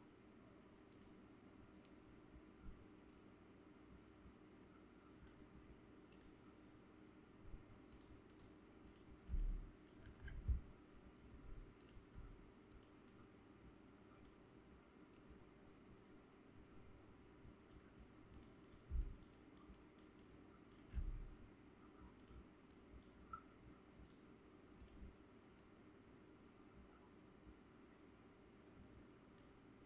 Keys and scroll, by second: 9.3 ctrl+space, 18.9 ctrl+space.